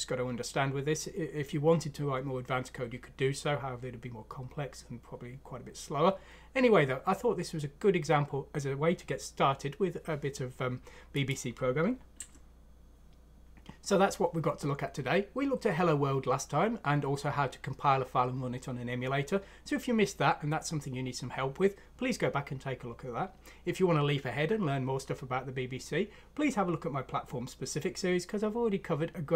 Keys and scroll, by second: 12.3 ctrl+alt+!.